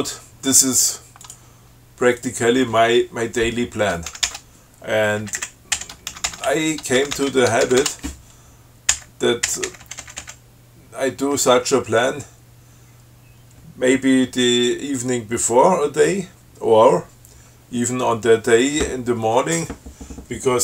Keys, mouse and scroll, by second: 1.5 click, 2.5 click, 4.4 ctrl+c, 5.5 Down, 6.0 Up, 6.4 ctrl+c, 6.7 ctrl+Down, 7.2 ctrl+c, 7.6 ctrl+Down, 7.9 ctrl+c, 9.1 Up.